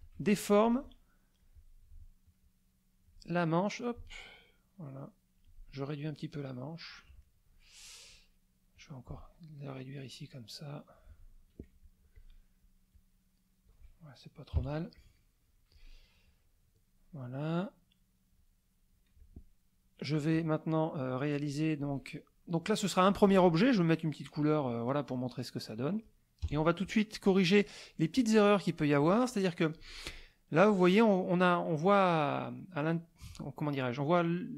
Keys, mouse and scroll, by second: 0.6 click, 2.4 alt+click, 3.4-5.6 alt+drag, 6.1-7.1 drag, 7.2 middle click, 8.7-11.1 drag, 11.8 ctrl+click, 12.9 click, 14.5 KP_Subtract, 15.2 middle click, 16.0 middle click, 17.5-18.5 drag, 19.2 ctrl+click, 24.2 click, 25.7 middle click, 26.4 KP_Add, 27.1 middle click, 29.0 click, 30.7 click.